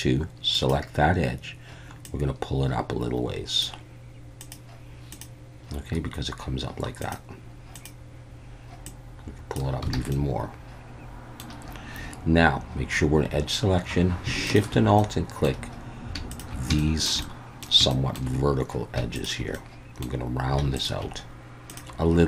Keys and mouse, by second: 0.6 click, 2.1-3.6 drag, 8.8 click, 9.9 alt+a, 10.1-11.4 middle drag, 15.0 middle click, 16.8 shift+middle click, 17.2 middle click, 17.9 shift+middle click, 19.5 middle click, 20.7 alt+shift+click.